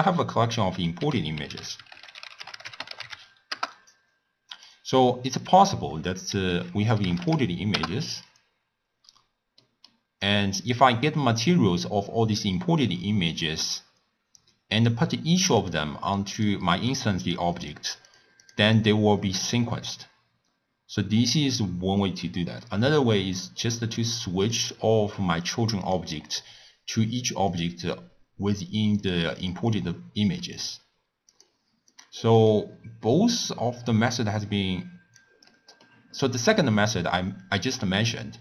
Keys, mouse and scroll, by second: 1.0 ctrl+a, 1.9 l, 5.3-8.3 drag, 9.0-9.6 scroll up 4, 9.6 middle click, 10.3 click, 12.4-15.4 drag, 15.6 click, 16.3 click, 16.9 click, 17.2 drag, 17.6 click, 18.1 click, 18.4 drag, 18.8 click, 24.4 click, 25.4 click, 25.8 click, 28.1 click, 28.9 click, 29.4 drag, 29.7 click, 30.4 click, 31.3 click, 31.9 click, 32.4 click, 34.4-35.4 drag, 35.4 middle click, 36.1-36.5 scroll down 1, 36.5-38.4 middle drag.